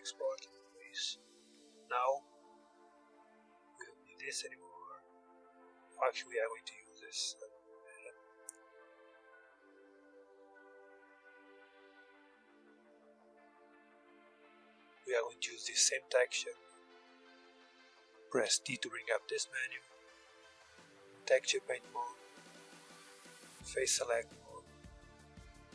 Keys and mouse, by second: 0.0-2.5 drag, 2.5-7.8 middle drag, 10.2-13.2 drag, 13.7-15.8 drag, 15.8-16.9 middle drag, 18.0 t, 19.6-21.2 drag, 21.2-22.6 middle drag, 22.6 click, 23.4-24.5 middle drag.